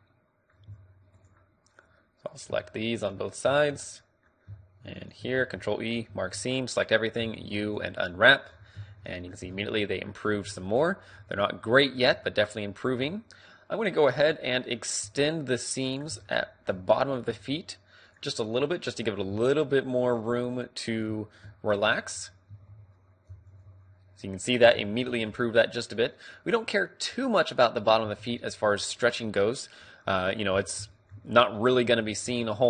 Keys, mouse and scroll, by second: 0.0-3.1 middle drag, 3.1 click, 4.0-5.0 middle drag, 5.0-6.7 right drag, 5.4 ctrl+e, 6.4 a, 7.3 u, 8.5-10.5 middle drag, 8.8 Tab, 10.6 Tab, 12.2 middle click, 13.1 a, 13.9 middle click, 15.2-16.5 drag, 15.2 a, 16.5-18.0 middle drag, 18.0 right click, 18.6-19.8 middle drag, 19.8 click, 20.0 middle click, 20.5-22.5 right drag, 21.8 ctrl+e, 22.6 a, 22.8 a, 23.4 u, 24.5-28.3 middle drag, 24.7 Tab, 28.2 Tab, 30.1-32.6 middle drag.